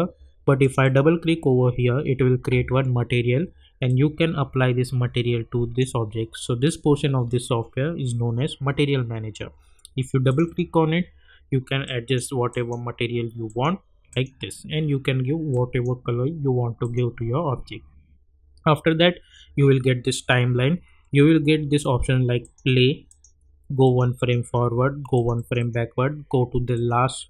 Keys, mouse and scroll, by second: 0.6 click, 3.8-16.8 drag, 22.3 click.